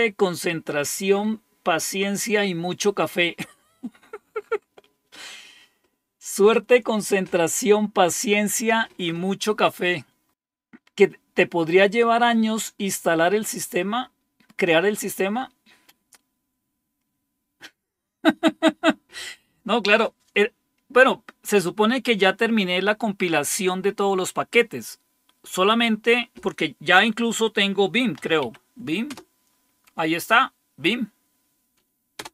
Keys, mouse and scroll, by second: 27.8-28.8 typing, 29.1 Return, 32.1 Return.